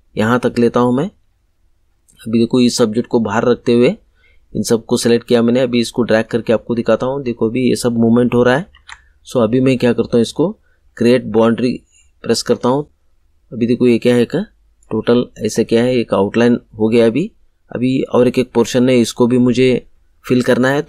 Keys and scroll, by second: 8.6 ctrl+z.